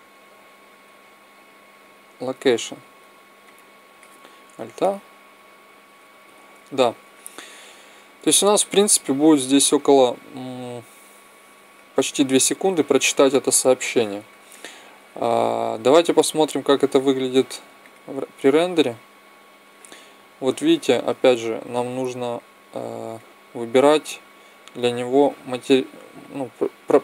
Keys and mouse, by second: 3.4-5.0 drag, 4.5 alt+a, 6.2 Escape, 14.4-16.3 middle drag, 16.9-18.8 drag, 22.2-24.1 drag, 24.6-26.4 drag.